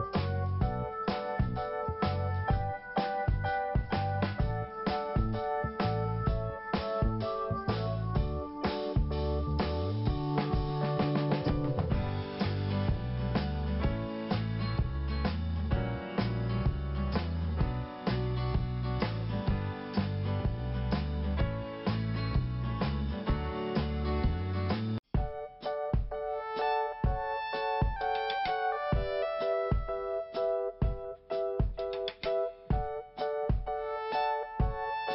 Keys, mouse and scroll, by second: 3.1 scroll down 1, 3.6 scroll up 1, 4.9 click, 4.9 click, 6.4 click, 6.6 click, 7.4 click, 13.2 scroll down 1, 14.2 click, 15.5 scroll up 1, 18.1 scroll down 1, 19.4 click, 19.5 click, 20.0 scroll down 2, 20.8 click, 20.8 click, 21.4 scroll up 1, 22.3 click, 24.9-25.3 typing, 26.5 scroll down 1, 27.7 scroll up 1, 29.1 click, 30.0 click, 30.5 click, 30.6 click, 31.3 click, 31.4 click, 32.3 click, 32.4 click, 33.0-33.3 scroll down 1, 34.4 click, 34.5 click.